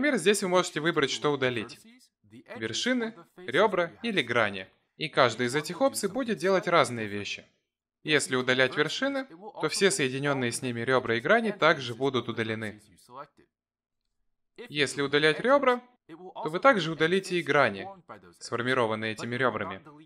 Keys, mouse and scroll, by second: 1.0 click, 1.6 click, 2.3 x, 14.0 ctrl+z, 14.8 shift+click, 15.4 shift+click, 16.9 x.